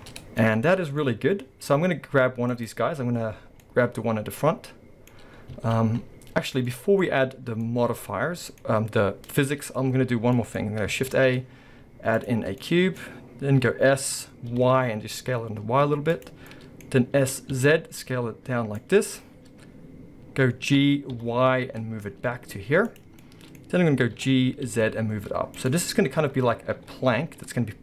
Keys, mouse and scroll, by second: 0.0-0.4 scroll up 2, 1.0-2.5 scroll up 2, 2.5 click, 3.4-5.7 middle drag, 3.4 scroll down 2, 5.3 scroll down 2, 5.6 alt+a, 5.9-6.6 scroll up 1, 6.7 middle click, 8.7-10.3 scroll down 1, 10.3 middle click, 11.0 shift+a, 12.6 middle click, 13.6 s, 16.3 click, 16.5 middle click, 17.2 s, 18.9 click, 20.8 g, 23.0 click, 23.2-25.7 middle drag, 23.7-24.2 scroll, 24.2 g, 25.7 click.